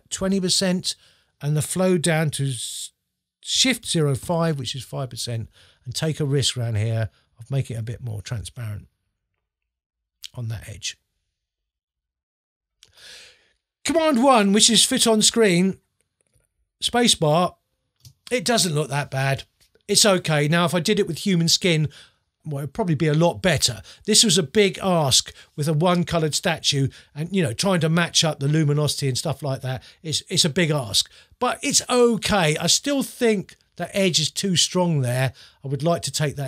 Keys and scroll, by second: 0.3 2, 3.8 shift+0, 14.5 super+1, 16.5 space.